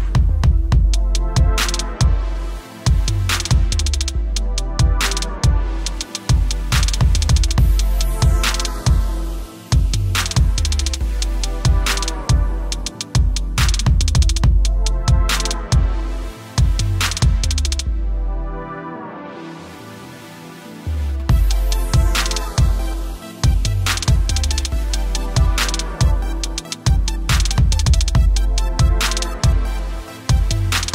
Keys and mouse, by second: 0.8 typing, 1.5 click, 14.2 click, 20.8 click, 25.5 click, 26.8 e.